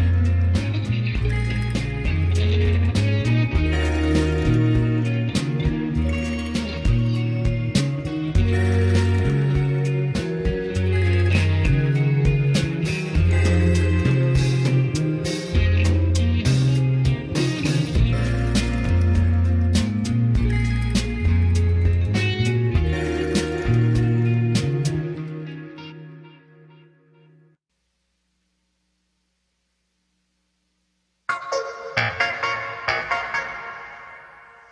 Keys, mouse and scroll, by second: 0.3 middle click, 3.2 s, 5.3 click, 5.8-7.7 middle drag, 9.2 scroll up 2, 14.8 click, 20.5 click, 30.2 middle click, 30.8-32.1 scroll up 2.